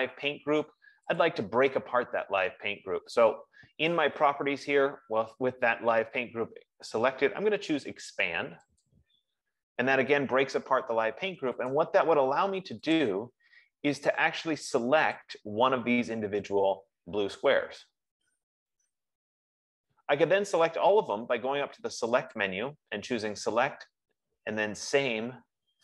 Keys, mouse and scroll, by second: 1.5 click, 9.1 click, 12.0 click, 13.4 click, 15.6 click, 22.9 click.